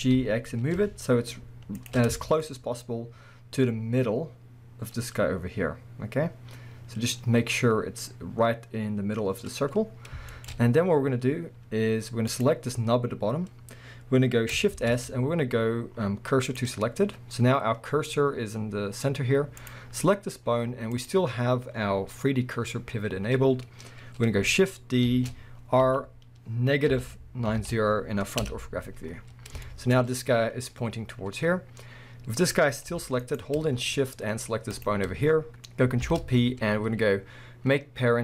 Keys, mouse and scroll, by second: 1.9 shift+click, 2.2-5.9 shift+scroll up 3, 2.4-12.3 shift+middle drag, 5.9-6.5 scroll up 1, 9.6-10.3 scroll down 2, 10.5-11.3 scroll down 2, 11.3 scroll down 1, 11.4-12.3 scroll up 2, 12.3 click, 12.8-14.8 scroll up 2, 14.8 shift+s, 17.0-17.4 scroll down 2, 17.4-18.1 scroll up 2, 18.1 scroll up 1, 19.6 click, 19.9 scroll down 1, 20.9-29.7 drag, 23.0-25.1 scroll up 1, 25.1 shift+d, 28.5 Return, 29.1 scroll down 1, 29.7-33.4 shift+middle drag, 30.0 scroll up 1, 31.1 scroll down 1, 31.6-32.6 scroll up 1, 32.9 g, 33.4 right click, 34.7 shift+click, 36.0 ctrl+p.